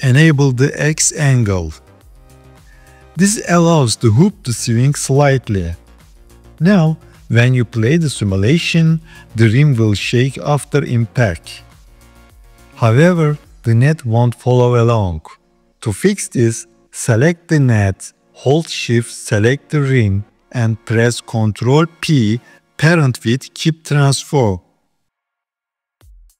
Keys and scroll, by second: 21.6 ctrl+p.